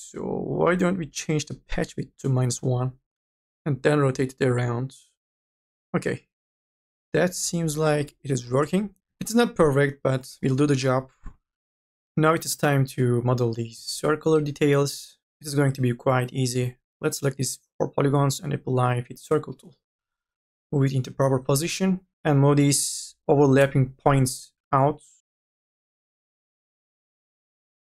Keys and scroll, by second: 9.0 2, 10.4-11.3 typing, 19.9 e, 21.6 1, 22.1 ctrl+z.